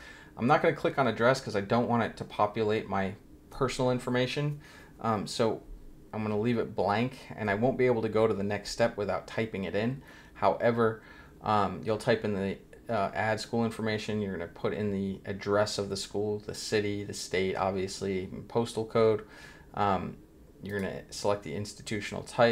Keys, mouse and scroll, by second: 9.9 scroll down 1, 19.0 scroll down 1, 20.7 click.